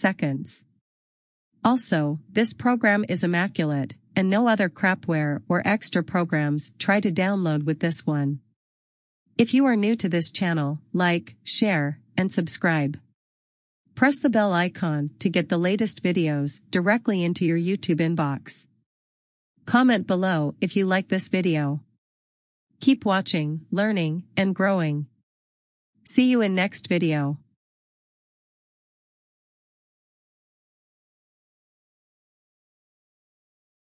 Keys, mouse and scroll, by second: 21.0 click, 29.1 click.